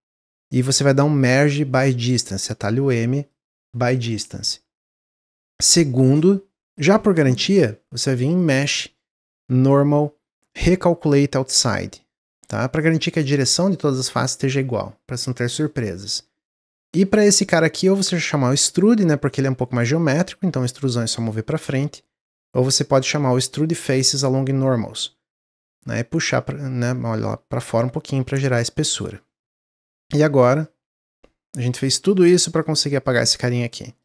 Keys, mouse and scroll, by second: 8.4-11.5 drag, 15.6-17.3 middle drag, 17.3-20.4 drag, 22.5-25.6 drag, 28.0-29.8 middle drag, 29.8 click, 31.4 shift+click, 33.0 shift+click, 33.7-34.0 shift+drag.